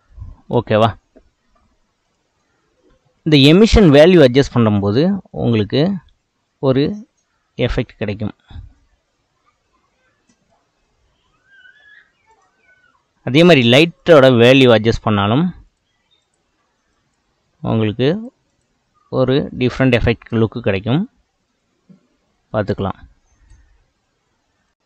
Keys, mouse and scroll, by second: 4.6-9.8 drag, 10.8-12.4 middle drag, 12.4 click, 15.7 click, 16.2 click, 16.9 click, 18.5-19.2 drag, 19.6 middle click, 20.2 space, 23.5 space.